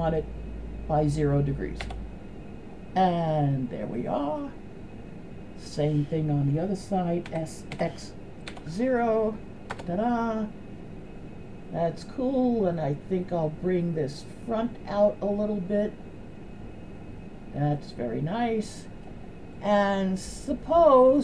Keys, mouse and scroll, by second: 3.4-4.0 middle drag, 7.3 s, 14.8 right click, 16.2-17.5 drag, 17.8-19.1 middle drag, 19.6-20.0 middle drag.